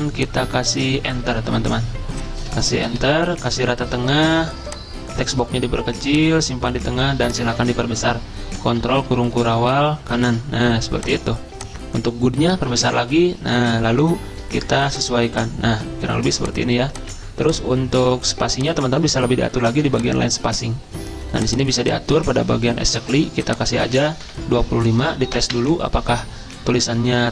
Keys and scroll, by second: 2.6 Return, 7.5 ctrl+a, 8.8 ctrl+], 9.0 ctrl+], 9.1 ctrl+], 24.3-26.0 typing.